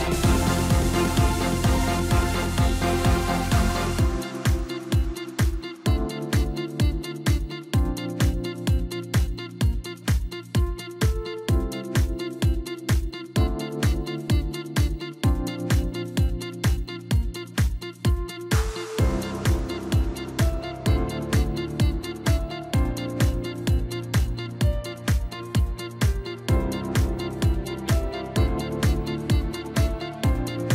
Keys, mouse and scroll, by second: 0.2-1.5 scroll down 3, 1.5-4.5 drag, 4.6-5.2 scroll up 3, 5.2-6.0 scroll down 2, 6.0 click, 8.1 scroll down 2, 8.4-10.8 middle drag, 10.8-11.6 scroll up 1, 11.6-14.5 middle drag, 14.7-16.2 drag, 16.2 ctrl+a, 17.6 scroll down 1, 17.7-19.5 middle drag, 19.5 click, 20.3 click, 21.4-22.8 drag, 23.5-24.5 middle drag, 24.5 drag, 24.8-25.1 scroll up 2, 25.1 scroll down 2, 25.3-27.8 middle drag, 27.8 scroll up 1, 28.1 scroll down 2, 28.3-30.7 middle drag.